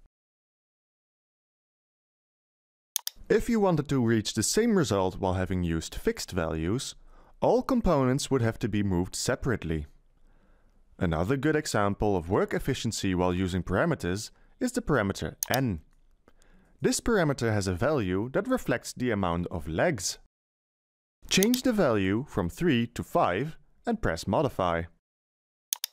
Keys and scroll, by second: 0.0 0, 2.8 0.